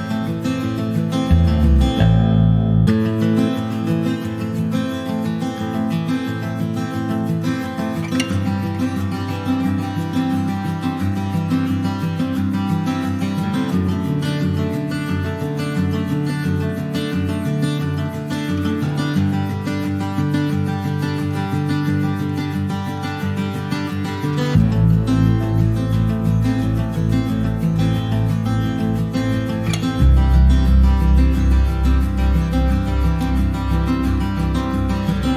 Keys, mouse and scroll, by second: 0.3 scroll up 1, 0.5 scroll down 1, 0.6-1.6 shift+middle drag, 1.6 Tab, 1.8 click, 2.1 middle click, 2.3 Tab, 2.7 click, 2.9 right click, 3.8 shift+middle click, 4.7 ctrl+1, 4.9 click, 5.2 middle click, 5.7 scroll up 1, 5.9 click, 6.7-8.0 middle drag, 8.0 ctrl+s, 8.1 click, 8.3 scroll down 2, 8.5 alt+middle click, 8.9 alt+middle click, 9.7 s, 11.0 middle click, 11.5 h, 12.1 shift+a, 13.3 middle click, 13.5 scroll up 2, 13.8 shift+middle click, 14.4 Tab, 14.7-20.0 right drag, 20.0 Tab, 20.0 click, 20.8 ctrl+s, 21.0 click, 21.6 Tab, 23.4 scroll down 3, 23.7 middle click, 24.1 click, 24.5 shift+s, 28.0 shift+a, 29.3-30.1 scroll down 1, 30.1 click, 30.8 alt+middle click, 32.4 shift+middle click, 33.2 r, 34.9 alt+middle click, 35.1-35.3 alt+scroll up 3.